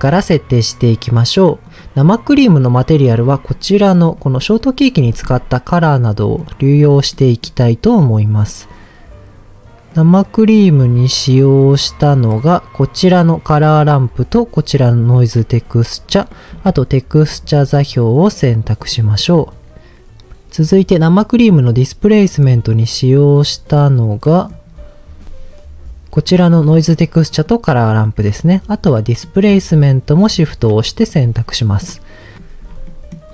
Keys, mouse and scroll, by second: 1.6 click, 3.1-4.2 scroll down 4, 4.2-4.9 scroll up 3, 4.9-5.9 scroll down 5, 5.9 middle click, 7.1 middle click, 8.2-9.4 scroll up 3, 9.9 middle click, 10.6-11.7 scroll up 4, 11.7-13.4 drag, 15.0 shift+click, 15.6-16.3 scroll down 4, 16.3 middle click, 17.3 shift+click, 17.9-19.2 middle drag, 21.6 middle click, 22.5-23.4 scroll up 5, 23.5-24.2 scroll up 2, 24.2 middle click, 26.4 shift+click, 27.3 shift+click, 28.5 scroll down 1, 29.0 middle click, 30.3 shift+click, 31.0-31.4 scroll down 2, 31.6 middle click, 32.6 scroll down 2, 32.8 middle click, 33.2-33.3 scroll up 2.